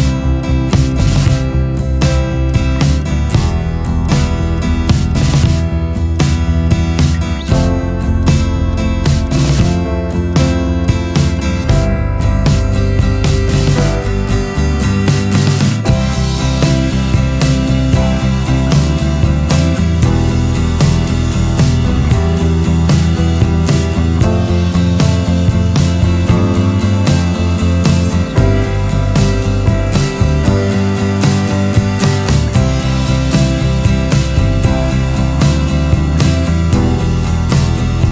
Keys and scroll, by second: 3.4 ctrl+z, 14.7 Left, 14.9 Left, 15.0-15.6 Left, 19.6 alt+space, 24.0 scroll, 33.2 ctrl+z.